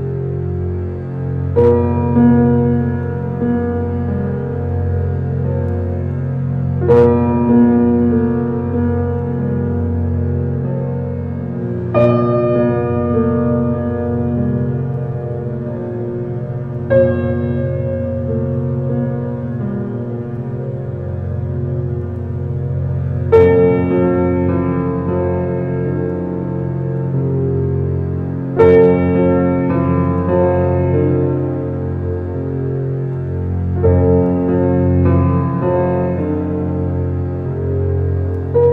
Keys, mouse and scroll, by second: 0.9 Tab, 1.3 click, 2.2 click, 2.8 click, 3.5 g, 8.3 s, 11.4-13.3 middle drag, 13.8 Tab, 14.6 s, 16.9 middle click, 17.3 scroll up 1, 17.3 Tab, 17.8-20.4 middle drag, 20.9 right click, 21.5 click, 22.4 click, 23.3 click, 23.6 shift+click, 24.3 g, 26.4-28.4 middle drag, 29.5 click, 30.2 click, 30.6 click, 30.8 shift+click, 31.1 middle click, 31.9 shift+click, 32.1 shift+click, 32.7 middle click, 33.3 scroll up 2, 33.6 middle click, 34.4 alt+e, 36.6 click, 37.0-37.4 scroll up 1, 37.4 shift+click, 37.8 middle click, 38.5 shift+click.